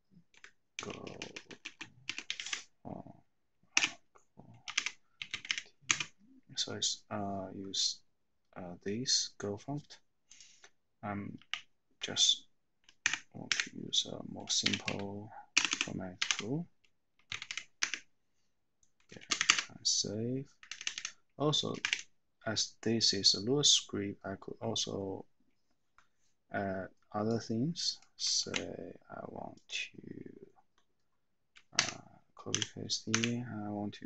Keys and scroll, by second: 0.4 Right, 0.9 BackSpace, 1.2 BackSpace, 2.3 Left, 3.8-6.0 typing, 11.5 a, 13.2 =, 14.4-17.5 typing, 17.8 Escape, 19.1-19.9 typing, 20.6 Up, 20.7 Up, 21.0 Up, 21.7 shift+o, 28.5 ctrl+c, 31.9 Escape, 32.5 o, 33.1 Escape.